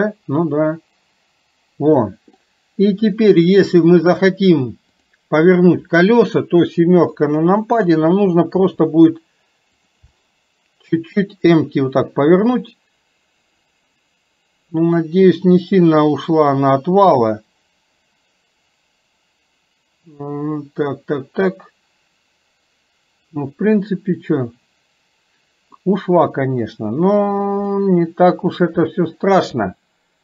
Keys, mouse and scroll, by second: 2.5-3.8 middle drag, 5.0 click, 7.1 KP_7, 8.7 r, 10.2-25.8 middle drag, 27.8-30.2 middle drag.